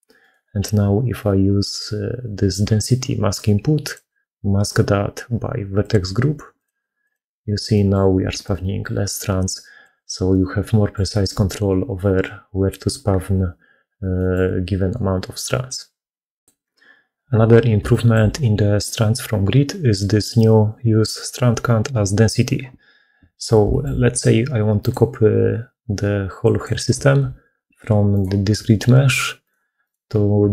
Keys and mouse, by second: 7.6 middle click, 8.1-11.1 d, 10.2 click, 10.3 right click, 14.0 click, 14.0 right click, 17.7 shift+middle click, 24.7-26.5 drag, 27.2 g, 29.7 click.